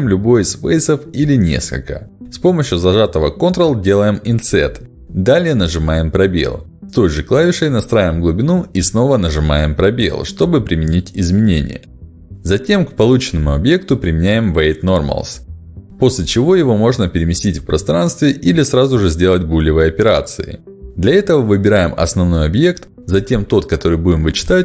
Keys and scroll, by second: 4.6 space, 7.8 space, 13.2 ctrl+alt+x, 19.0 g, 20.0 ctrl+z.